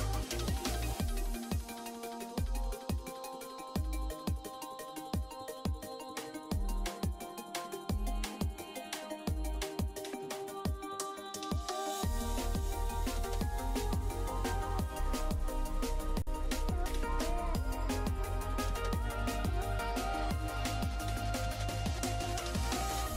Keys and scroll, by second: 21.9 F5, 22.9 s.